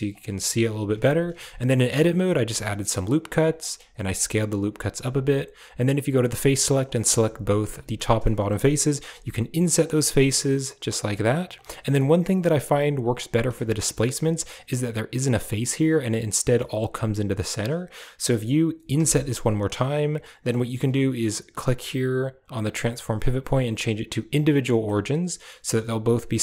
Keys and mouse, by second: 0.7 KP_Decimal, 1.2 Tab, 1.6 middle click, 2.2 ctrl+r, 3.9 s, 6.0 click, 6.5 right click, 6.8 click, 7.3 shift+right click, 7.8 click, 8.4 click, 8.9 i, 9.8 i, 10.9 i, 11.6 i, 13.7 shift+middle click, 14.2 middle click, 18.9 i, 20.1 click, 21.5-24.3 drag, 24.7 middle click, 25.9 middle click.